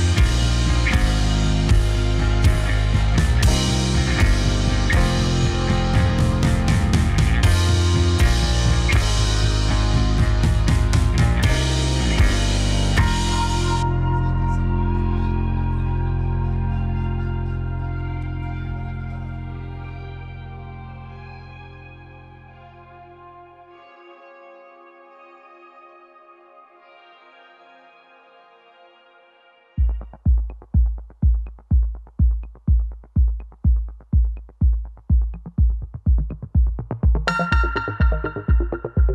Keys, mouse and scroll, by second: 0.9 click, 1.5 `, 3.2 alt+d, 5.6 s, 6.7-7.7 middle drag, 7.9 r, 9.8 s, 10.2 click, 10.3-12.2 middle drag, 12.2 click, 12.4-13.0 middle drag, 13.0 r, 13.5 click, 13.6 middle click, 14.2 click, 14.6 middle click, 15.3 `, 16.2 alt+d, 19.2 shift+r, 19.5 shift+r, 19.8 shift+r, 20.8 click, 21.2-22.0 middle drag, 22.0 r, 23.2 middle click, 23.7 click, 24.0 r, 25.0-25.3 middle drag, 25.3 r, 25.6 click, 25.8-26.3 middle drag, 26.3 drag, 27.0 `, 28.1 r, 29.3 click, 31.5 r, 31.8 r, 32.4 click, 32.7-34.0 middle drag, 34.7 click, 35.1-36.0 middle drag, 36.1-36.4 middle drag, 36.4 r, 37.1 click, 37.3-37.8 middle drag, 37.8 click, 38.0 r, 38.7 click, 38.8-39.1 middle drag.